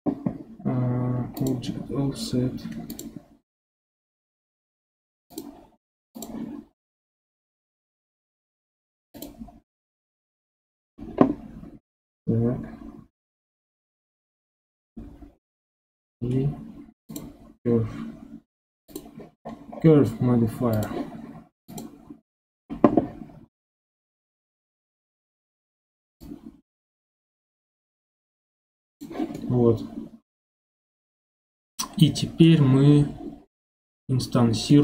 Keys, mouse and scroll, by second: 1.4 click, 2.9-6.2 drag, 14.5 scroll down 4, 15.2 scroll down 1, 16.3 scroll up 2, 17.1-19.4 drag, 19.4-19.8 scroll down 11, 20.7 click, 24.5-26.2 scroll up 2, 26.2-29.2 drag, 29.3-34.8 middle drag.